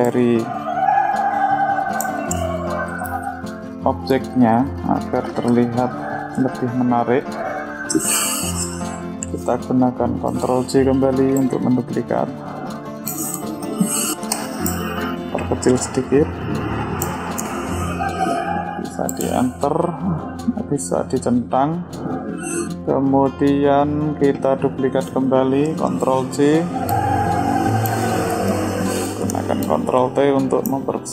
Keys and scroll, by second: 10.1 ctrl+j, 25.2 ctrl+j.